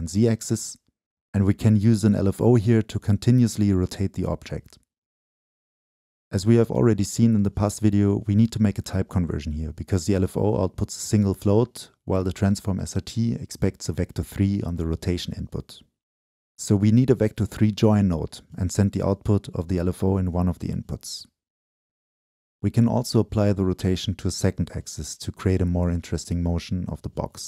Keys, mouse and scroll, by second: 2.1 middle click, 3.0-5.8 shift+drag, 5.8 Return, 7.1-13.6 drag, 9.2 Right, 10.8 Right, 14.2 Right, 14.3 click, 16.6-17.6 scroll down 2, 17.6 Right, 18.7-19.0 scroll down 2, 19.1 Right, 20.6-27.4 drag.